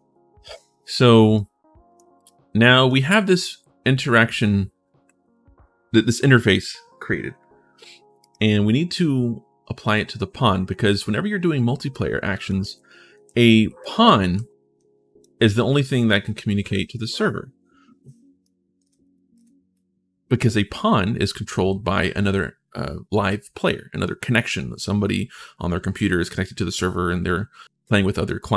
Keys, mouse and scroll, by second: 1.1 right click, 2.6 click, 8.0 click, 11.7-15.0 right drag, 12.2 d, 12.9 d, 13.8 w, 18.2-19.5 right drag.